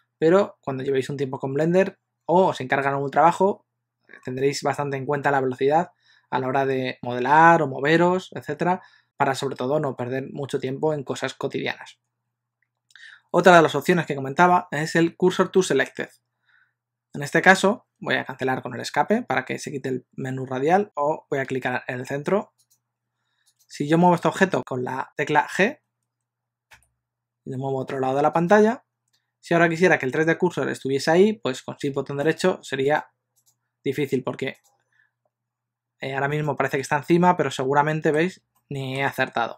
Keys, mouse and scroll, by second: 23.6 click, 26.8 g, 32.4 shift+right click, 32.9-36.9 shift+right click, 37.2 middle click, 38.6 shift+middle click.